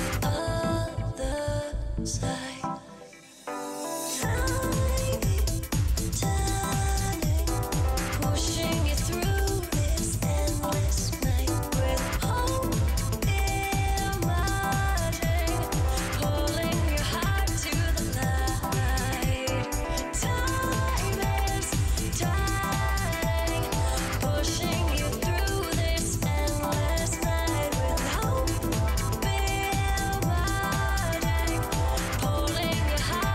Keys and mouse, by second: 0.0 click, 2.8 right click, 3.8 ctrl+x, 5.2 middle click, 6.4 ctrl+Tab, 6.9 ctrl+Tab, 8.9 ctrl+x, 9.4 ctrl+z, 9.9 ctrl+x, 12.0 z, 12.4 z, 14.0 ctrl+Tab, 16.1 ctrl+Tab, 18.0-20.1 right drag, 20.0 middle click, 20.1 click, 20.4 ctrl+Tab, 21.6 j, 21.9 ctrl+Tab, 22.4 ctrl+Tab, 24.0 alt+shift+right click, 28.3 right click, 31.1 middle click, 31.4 middle click, 33.2 middle click.